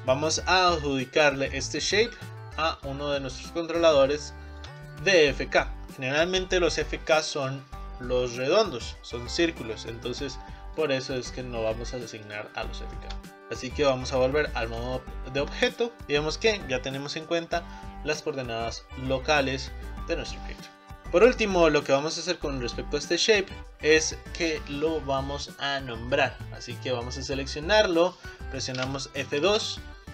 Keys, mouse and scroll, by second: 3.0-4.3 scroll down 4, 4.3-7.8 shift+middle drag, 11.3-12.4 shift+middle drag, 12.4-13.0 scroll up 3, 13.0-14.8 shift+middle drag, 14.8 Tab, 15.7 click, 18.4-19.4 scroll down 1, 19.8 scroll down 2, 20.2 middle click, 20.7 click, 27.4 click, 29.5 F2.